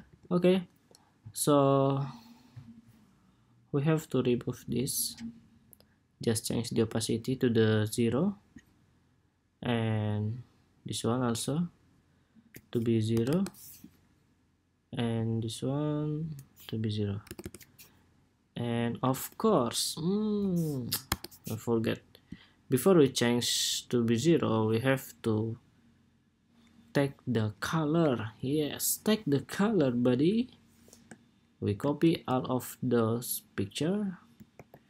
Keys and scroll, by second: 31.8 super+c, 34.2 super+v.